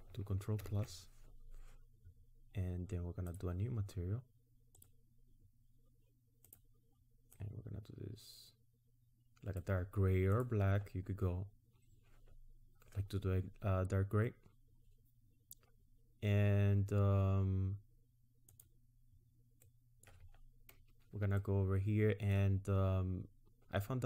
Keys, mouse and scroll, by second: 0.6 ctrl+KP_Add, 3.3 click, 4.8 click, 6.5 click, 18.5 click, 19.7 middle click, 20.3 scroll up 3, 21.4 middle click, 22.6 scroll down 1.